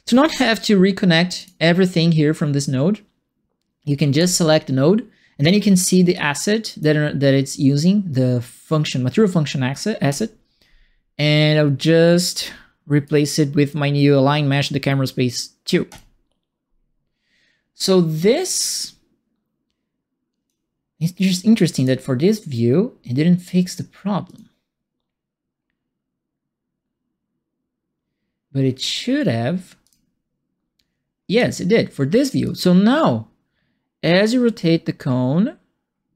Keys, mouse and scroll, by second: 1.3 click, 4.1 click, 6.1 click, 10.0 click, 12.4 right click, 15.8 click, 18.5-20.4 drag, 21.1 click, 24.2 click, 28.7 click, 29.8 click, 31.5 alt+right click, 32.4-36.1 alt+drag.